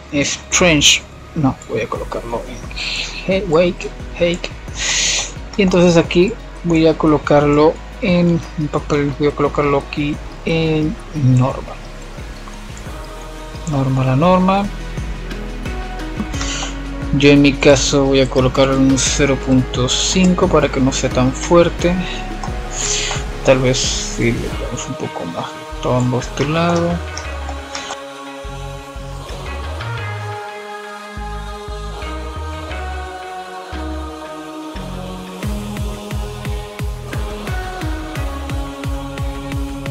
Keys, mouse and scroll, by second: 3.1-3.6 middle drag, 3.6-4.4 scroll up 5, 4.4-5.9 scroll down 3, 5.9-6.4 scroll down 1, 6.4-10.8 drag, 10.8-12.8 scroll up 2, 12.8-15.7 drag, 15.7-16.3 scroll down 5, 16.3-18.4 middle drag, 18.4-18.8 scroll down 4, 18.8-20.1 middle drag, 20.1 scroll up 5, 20.4-22.0 middle drag, 22.0-25.9 drag, 27.9 middle click, 28.7 scroll up 2, 29.0-29.4 middle drag, 29.4-29.7 scroll down 4, 29.7-31.1 middle drag, 31.1 click, 31.6 shift+a, 34.1-35.6 middle drag, 35.6 click, 39.6 click.